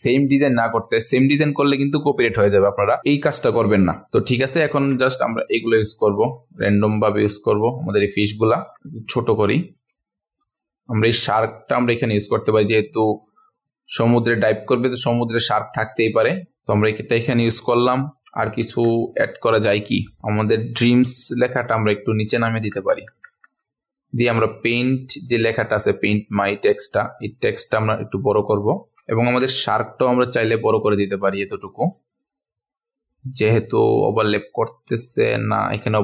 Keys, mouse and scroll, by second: 0.5 space, 0.6 click, 4.6 ctrl+a, 5.1 click, 6.4 shift+click, 6.8 shift+click, 7.4 click, 8.5 ctrl+alt+scroll up 1, 8.9 shift+click, 9.8-11.7 drag, 11.8 ctrl+alt+scroll up 1, 13.0-14.2 drag, 14.5-18.1 drag, 18.4 ctrl+alt+scroll down 1, 19.4 click, 20.2-21.4 scroll down 1, 21.8 click, 22.6-23.0 typing, 24.1 click, 25.6-27.5 shift+drag, 28.1 click, 29.1 ctrl+alt+scroll up 1, 31.9 shift+click, 33.7-35.7 drag.